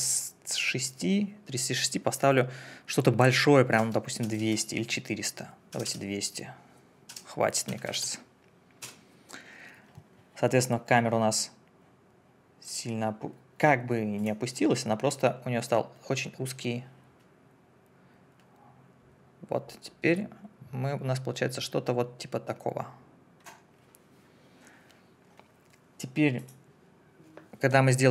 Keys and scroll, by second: 3.8 4, 4.2 0, 5.7 BackSpace, 7.7 2, 8.8 Return.